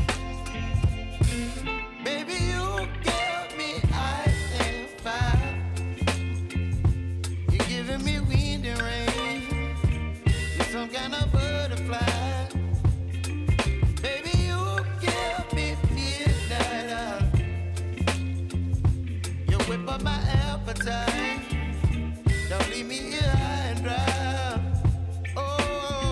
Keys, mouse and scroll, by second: 0.1 [, 0.9 click, 2.3 [, 3.1 space, 5.8-7.3 drag, 8.1 ctrl+shift+c, 8.6-12.7 typing, 13.2 Return, 13.9 space, 16.7 space, 17.5 click, 18.3 ctrl+a, 20.0 click, 20.9 ctrl+a, 21.6 ctrl+shift+c, 23.4-25.6 typing.